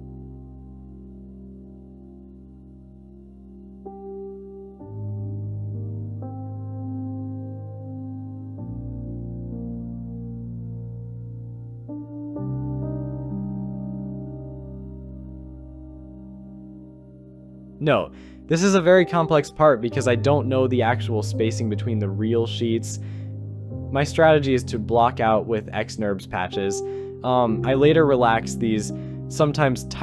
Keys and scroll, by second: 3.1 shift+d, 5.0 shift+x, 7.0 shift+r, 8.9 Return, 9.8 shift+w, 24.9 Escape, 26.6 Delete, 29.3 b.